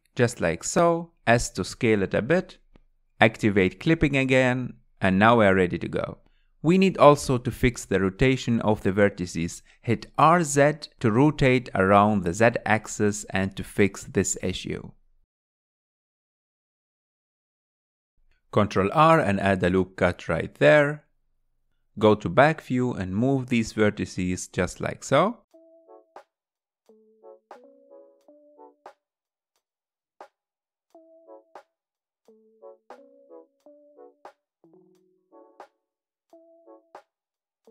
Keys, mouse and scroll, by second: 0.2 ctrl+z, 2.0 click, 2.9 click, 4.7 click, 6.8 r, 11.8 scroll down 3, 12.1-15.1 middle drag, 15.9 KP_1, 17.1-17.5 scroll up 4, 18.6 ctrl+r, 21.9-24.1 middle drag, 24.1 ctrl+KP_1, 25.5 click, 26.0-28.3 typing, 27.0 click, 27.5 click, 28.2 click, 28.8 middle click, 29.2 click, 29.3-33.2 typing, 29.7 click, 30.2 middle click, 30.5 click, 31.0 middle click, 32.0 click, 33.1 click, 33.6-35.0 middle drag, 35.0 click, 35.2 g, 35.7 click, 35.8 g, 36.2 middle click, 36.5 click, 36.6 g, 37.1 middle click, 37.5 click.